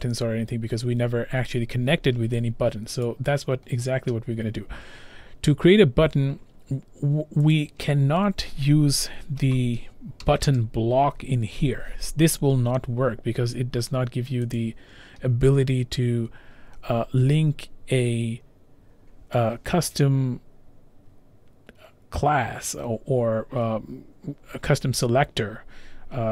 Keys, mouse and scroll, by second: 2.6-3.0 scroll, 3.0 scroll down 1, 3.1 click, 3.6-7.5 scroll, 7.5 click, 9.0-10.5 typing, 14.6 click.